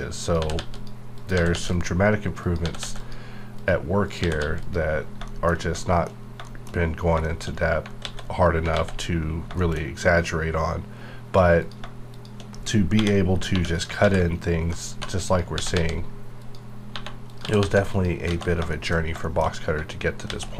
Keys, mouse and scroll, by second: 0.4 g, 0.5 g, 0.8 click, 1.3 g, 1.5 g, 1.7 click, 2.6 g, 2.8 g, 3.0 click, 4.2 g, 4.4 g, 4.6 click, 5.0 scroll down 1, 5.3 shift+middle click, 5.6 shift+scroll down 1, 5.8 shift+middle click, 6.1 shift+scroll up 2, 6.5 shift+middle click, 6.7 scroll up 1, 7.0 scroll down 1, 7.2 shift+middle click, 7.5 scroll down 1, 8.0 alt+x, 8.7 alt+x, 9.3-11.3 scroll up 5, 9.6 shift+middle click, 11.3 1, 12.1 shift+click, 13.0 j, 13.5 j, 13.7 click, 14.0 ctrl+x, 14.9 2, 15.3 click, 15.5 g, 15.7 g, 16.4 click, 16.9 1, 17.3 click, 17.4 g, 17.6 g, 17.9 click, 18.4 alt+a, 18.5 scroll down 1, 18.7 shift+middle click, 19.0 shift+scroll down 1, 19.5 shift+middle click, 20.3 alt+x.